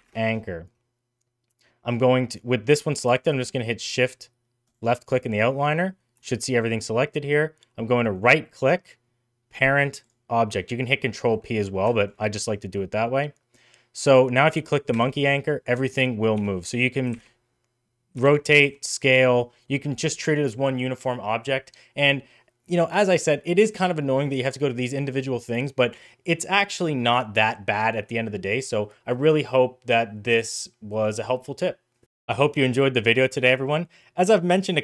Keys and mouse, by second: 4.7 shift+click, 5.6 middle drag, 6.2 shift+middle drag, 8.3-10.1 right drag, 11.3 middle click, 11.9 shift+middle drag, 14.9 g, 16.5 middle click, 17.1 r, 18.6 s, 24.2 click, 25.4 click.